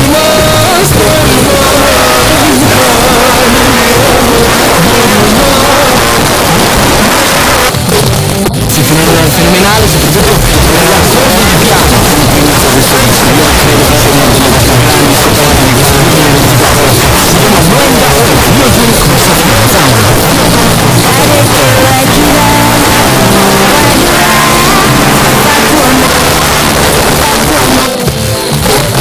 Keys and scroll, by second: 5.9 Page_Down, 26.1 Page_Down.